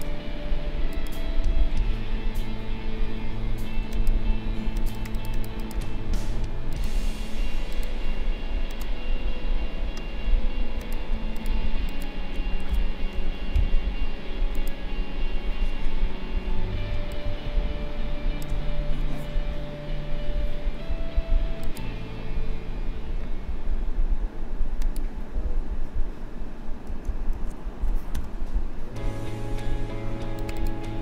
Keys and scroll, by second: 13.1 ctrl+g, 16.9 space, 27.3 ctrl+shift+a, 28.1 k.